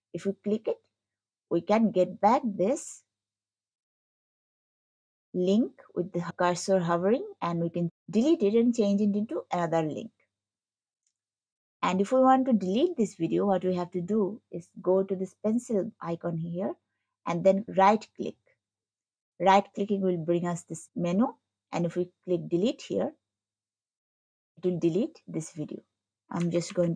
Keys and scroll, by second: 4.0 scroll.